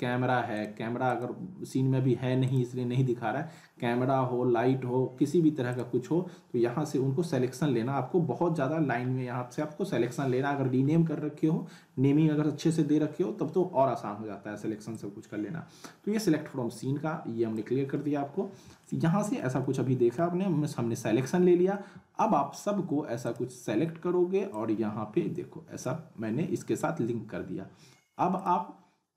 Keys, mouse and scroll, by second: 5.7 click, 9.0-10.9 scroll down 2, 14.9-17.7 drag, 18.8-19.4 alt+middle drag, 20.5 scroll down 1, 21.7-22.3 middle drag, 23.2-26.1 drag, 28.4 click.